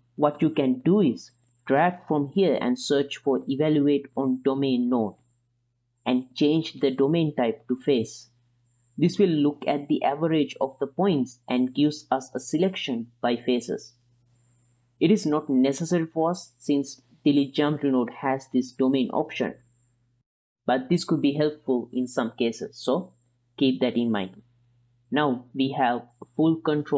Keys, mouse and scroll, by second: 2.3-5.5 drag, 6.5 ctrl+shift+click, 7.3-8.8 drag, 10.5 ctrl+click, 11.3-13.2 middle drag, 14.0 click, 14.9 middle click, 16.0-16.7 drag, 17.1-18.1 drag, 18.7 m, 20.1 middle drag, 20.6 x, 21.0-21.6 middle drag, 22.0-23.1 drag, 23.5 middle click, 24.8 g.